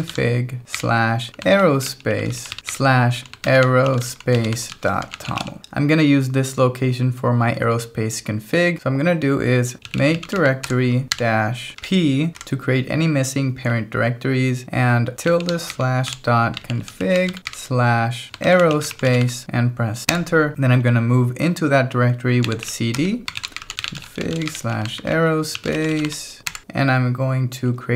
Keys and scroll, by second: 0.0-5.8 typing, 9.6-12.4 typing, 15.3-19.7 typing, 20.1 Return, 22.4-26.6 typing.